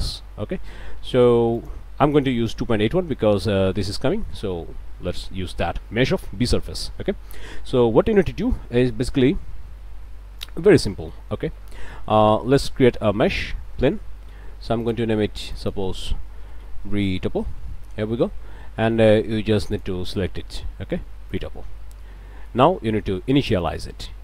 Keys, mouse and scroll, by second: 1.6 click, 3.0 shift+click, 3.6 shift+scroll down 1, 3.8 shift+click, 4.1 shift+click, 7.5 middle click, 7.9 scroll down 1, 8.3 shift+middle click, 10.4 click, 11.2 click, 11.7 shift+click, 12.4 shift+a, 13.3 click, 14.8 click, 15.4 click, 16.4-17.4 typing, 17.8 Return, 19.7 click, 21.3 click, 23.6 click.